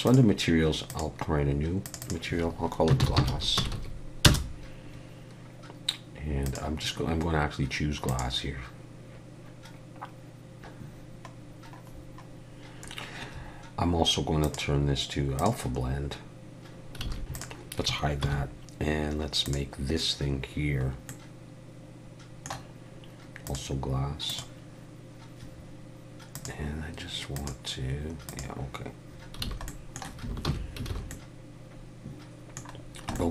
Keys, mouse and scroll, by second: 0.0 click, 0.9 click, 1.8 click, 2.0 click, 3.7 s, 6.4 click, 11.3-12.6 scroll down 7, 12.8-14.4 scroll down 2, 14.4 click, 16.8 click, 17.1 alt+a, 17.1 middle click, 17.3 click, 18.2 h, 19.4 click, 20.8 scroll up 3, 21.1 middle click, 23.4 click, 26.3 click, 29.5 alt+a, 29.7 middle click, 30.5 alt+h, 30.9 alt+a, 31.1 middle click, 32.8 scroll down 2, 33.1 shift+middle click.